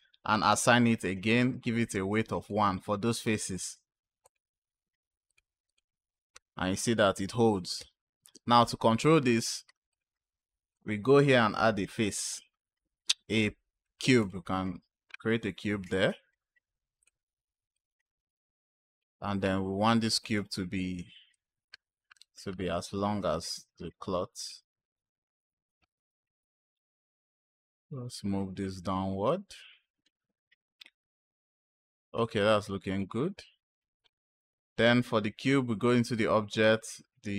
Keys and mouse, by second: 1.7 click, 4.1 click, 5.1-5.6 drag, 6.3 space, 7.7 space, 9.8 click, 10.6 click, 11.5 shift+a, 15.5 s, 16.9 click, 17.6-18.9 drag, 20.1 click, 21.2-24.3 drag, 26.1 click, 27.3-28.4 drag, 29.1 click, 31.6-32.8 drag, 34.6 click.